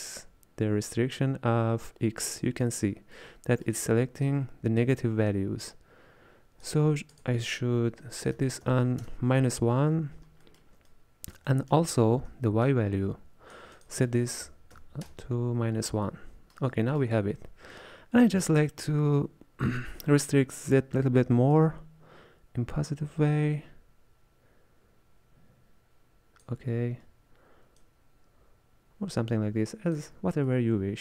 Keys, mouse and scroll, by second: 0.3-3.2 shift+drag, 3.2-5.4 middle drag, 5.4-10.5 shift+drag, 10.5-12.7 shift+middle drag, 12.7-16.1 shift+drag, 16.1-21.6 middle drag, 21.6-24.6 shift+drag, 27.9-30.5 shift+drag, 30.5-31.0 middle drag.